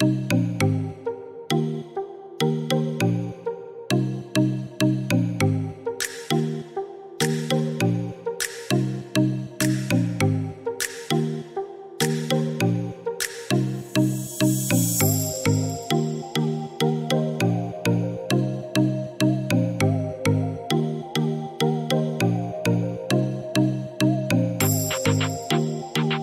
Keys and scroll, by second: 9.9 1, 10.4 2, 13.7 5, 14.2 Return.